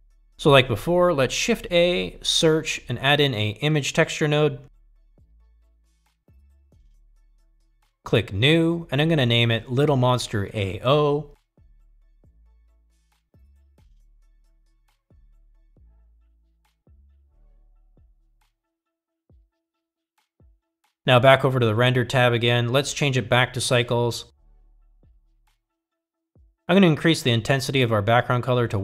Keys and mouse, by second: 1.1 middle click, 1.5 middle click, 2.9 click, 3.3 shift+a, 10.1-21.5 drag, 12.1 t, 23.6-25.3 drag, 28.4 click.